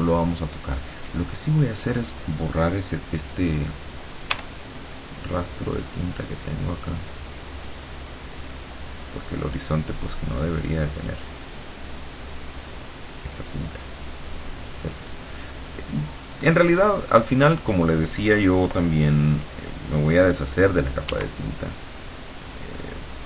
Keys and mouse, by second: 0.2 click, 4.4 e, 5.2-7.9 drag, 14.0-15.4 drag, 21.1 w, 22.9 click.